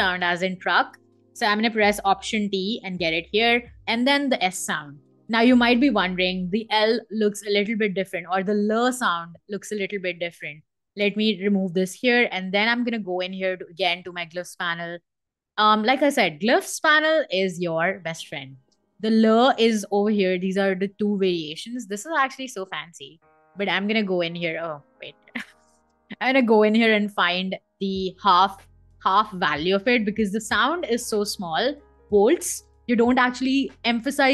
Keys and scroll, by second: 1.8 alt+t, 3.4 s, 4.4 Escape, 10.7 BackSpace, 24.1 super+z.